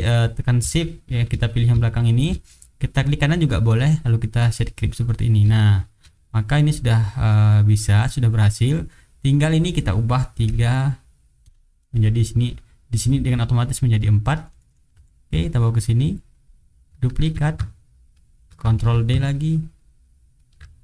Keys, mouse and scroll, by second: 1.0 shift+click, 1.9 shift+click, 3.1-4.7 right drag, 5.1 middle click, 5.5 shift+right click, 6.1 shift+middle click, 6.7-7.8 shift+drag, 9.4 click, 10.4 KP_3, 11.4 Return, 13.9-15.2 middle drag, 15.3-16.7 drag, 17.1 ctrl+d, 17.3-18.6 ctrl+drag, 18.7 ctrl+d, 18.8-20.5 ctrl+drag, 20.6 ctrl+click.